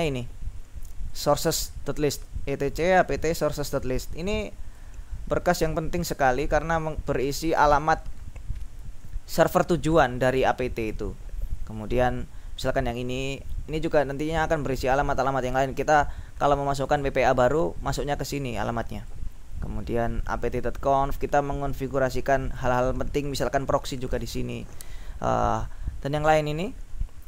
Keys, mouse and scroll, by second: 1.2-5.3 drag, 13.2-16.0 drag, 16.9 click, 18.1-19.7 drag, 19.7-20.1 scroll down 1, 21.0-23.2 drag, 25.3-25.9 scroll down 2, 26.6-27.2 scroll down 2.